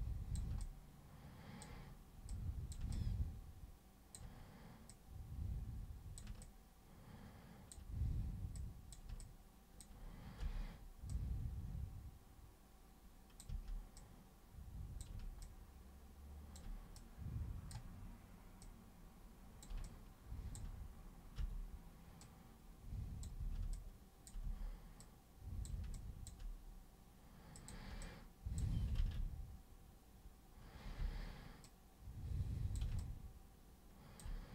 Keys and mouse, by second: 0.6 alt+super+click, 2.3 super+click, 2.9-4.2 alt+super+drag, 4.9 super+click, 6.4-7.8 alt+super+drag, 8.5 super+click, 9.2-9.8 alt+super+drag, 10.4 super+r, 11.1-13.4 super+drag, 13.5 super+w, 14.0 super+click, 15.4-16.6 alt+super+drag, 16.9 super+click, 18.6 super+click, 19.9-20.6 alt+super+drag, 21.4 super+r, 22.2 super+click, 23.4 super+w, 23.7-24.2 alt+super+drag, 24.4 super+w, 25.0 super+click, 25.9-26.3 alt+super+drag, 27.6 super+click, 28.0 alt+super+click, 30.8 super+t, 31.0 super+r, 31.6 super+click, 33.0-34.2 alt+super+drag.